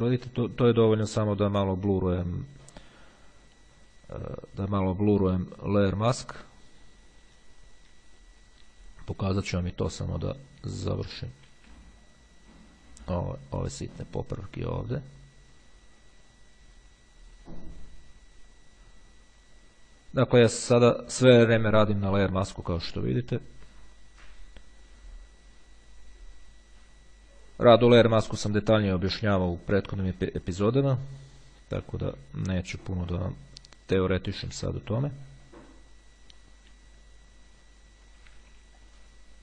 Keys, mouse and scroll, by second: 0.3 [, 1.3-5.6 drag, 6.4-10.1 drag, 10.9 click, 11.3 ], 11.7 [, 12.2-21.9 drag, 23.2-31.4 drag, 32.7-38.9 drag, 38.5 ], 38.9 middle click, 39.0-39.4 drag.